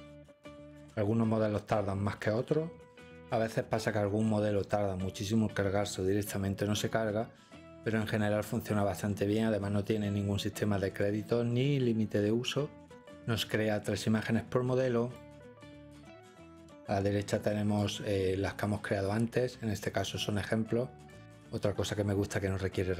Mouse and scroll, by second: 15.2-15.9 drag, 19.8 click.